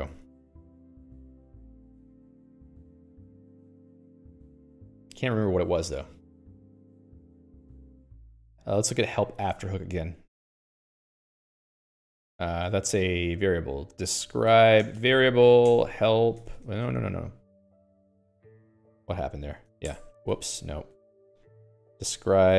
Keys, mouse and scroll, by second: 0.5 Escape, 0.7 Escape, 2.5-3.6 scroll up 13, 3.6 Escape, 3.8 Escape, 3.9 Escape, 4.1 Escape, 4.3 Escape, 4.5 Escape, 4.7 Escape, 4.8 Escape, 5.1 click, 11.0 alt+x, 14.6-17.1 typing, 16.2 Return, 17.3 Escape, 17.5 Escape, 18.2 alt+click, 19.0 alt+x, 19.9 ctrl+j, 20.9 ctrl+g, 21.0 ctrl+g, 21.4-22.5 typing, 22.0 alt+x.